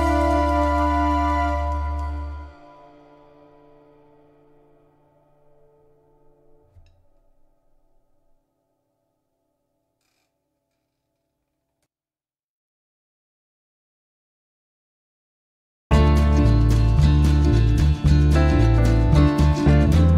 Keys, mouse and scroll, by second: 1.0 space, 4.5 ctrl+click, 6.3-9.6 drag, 10.1 click, 15.1 KP_Add, 15.8 KP_Add.